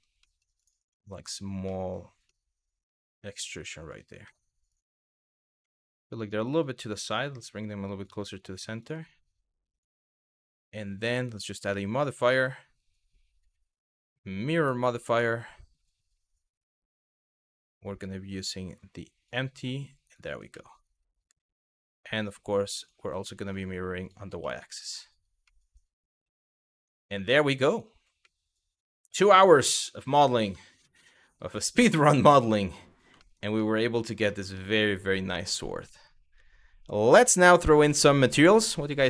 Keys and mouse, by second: 0.2 click, 0.6-0.9 middle drag, 1.4 middle click, 1.9-3.5 middle drag, 3.9 middle click, 4.3 click, 5.2 KP_1, 6.1 g, 7.7 click, 9.4 click, 10.9-14.3 drag, 19.8 click, 20.2-20.7 middle drag, 23.0 middle drag, 23.6 click, 24.1 middle click, 25.2-25.9 middle drag, 26.4 click, 26.8 middle drag, 28.0-28.9 middle drag, 29.4 middle click, 30.1 shift+middle click, 32.0-32.4 middle drag, 32.9 shift+middle click, 33.2-33.7 middle drag, 33.9 shift+middle drag.